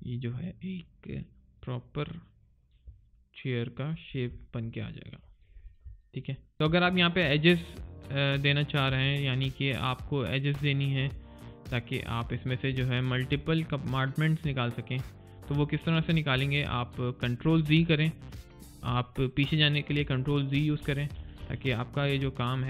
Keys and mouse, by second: 3.0 alt+right click, 4.0 alt+click, 4.2 alt+right click, 4.5 alt+click, 6.3 alt+middle click, 6.5 alt+right click, 6.8 alt+click, 9.4 alt+right click, 10.0 alt+middle click, 10.4 alt+click, 12.7 alt+middle click.